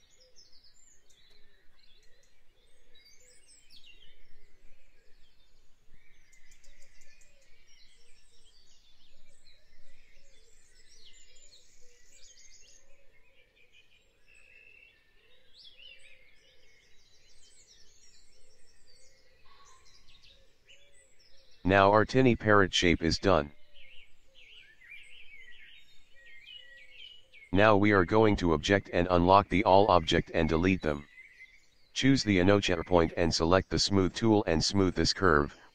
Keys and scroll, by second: 5.4 v, 7.5 p, 10.3 ctrl+z, 12.5 v, 15.8 l, 18.5 v, 21.8 v, 29.9 Delete.